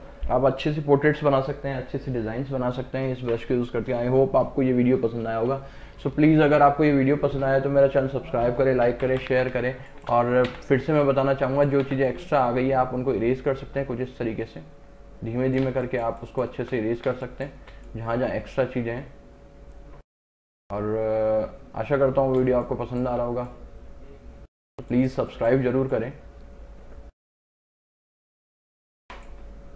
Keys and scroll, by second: 8.9 ctrl+KP_Add, 9.6 space, 10.6 x, 15.7 space, 22.5 space, 28.4 space.